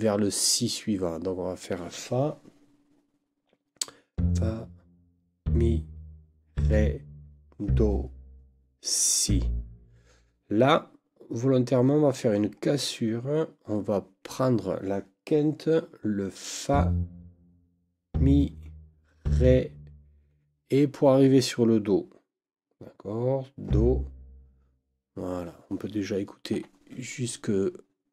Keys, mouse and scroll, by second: 26.5 Escape.